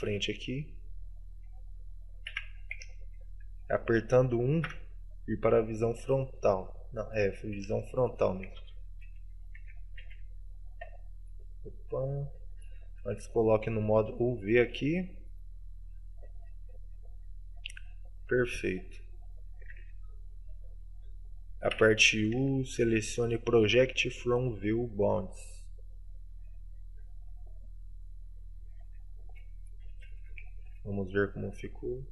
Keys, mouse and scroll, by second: 0.2 scroll down 4, 0.7 middle click, 2.4 z, 2.8 KP_1, 4.7 KP_5, 6.5 middle click, 7.6 KP_1, 19.8 scroll up 10, 23.1 scroll, 28.9 scroll down 1.